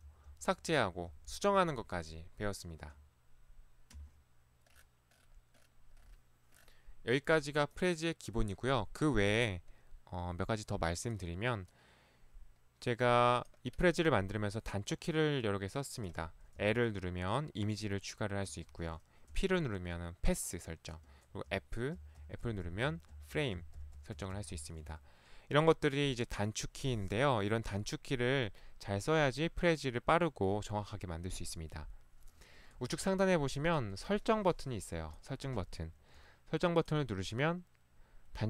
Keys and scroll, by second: 0.0 Left, 2.9 Escape, 4.0 Escape, 16.7 l, 18.5 Escape, 19.4 p, 21.1 Escape, 21.6-24.6 typing, 24.9 Escape, 25.8 typing, 32.8 ctrl+1, 33.9 ctrl+1, 36.0 ctrl+Escape.